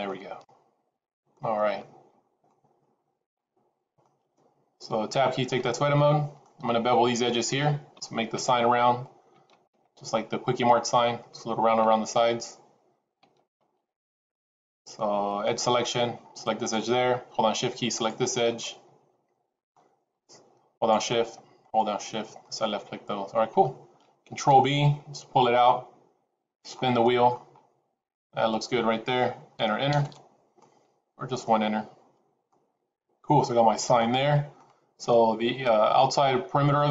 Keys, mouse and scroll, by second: 1.5-2.3 scroll down 3, 2.3 middle click, 2.3-2.9 scroll down 1, 5.3 Tab, 5.8 middle click, 7.0-7.4 scroll up 3, 7.4 shift+middle click, 15.8 click, 16.4 click, 17.8 shift+click, 18.0 shift+click, 18.5 middle click, 20.6 shift+click, 21.5 shift+click, 22.3 middle click, 24.2 ctrl+b, 30.0 Return, 30.5 middle click, 32.4 middle click.